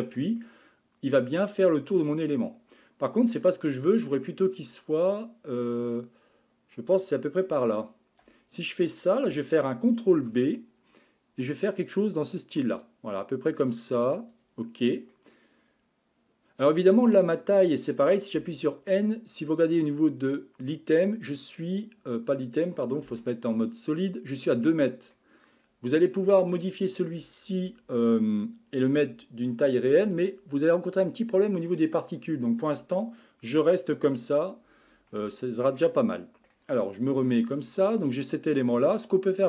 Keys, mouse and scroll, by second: 0.4-3.4 middle drag, 7.7 alt+click, 10.2 ctrl+b, 15.1-18.3 middle drag, 18.5 n, 20.6 click, 23.0 Tab, 25.1-28.3 middle drag, 35.3-37.1 shift+middle drag, 37.1 Tab, 37.7-38.8 middle drag, 38.8 scroll up 1.